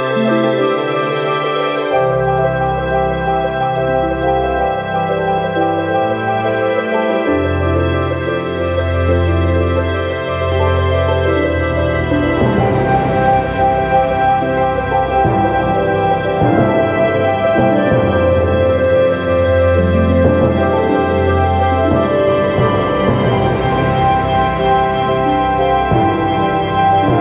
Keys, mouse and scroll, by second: 0.5 click, 1.8 click, 2.9 click, 4.5-4.8 scroll up 1, 5.1-5.5 scroll down 1, 6.7 click, 8.1 click, 12.0 click, 13.2 click, 14.2 click, 15.8 click, 16.7 click, 18.0 click, 21.2 click, 23.3 click, 24.8 click.